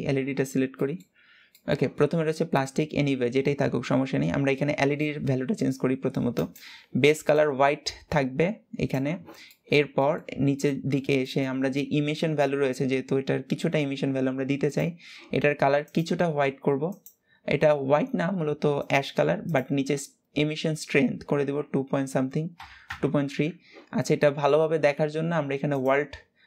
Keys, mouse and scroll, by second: 1.3-7.0 middle drag, 7.0 click, 15.6 click, 24.7 ctrl+s, 25.4 click.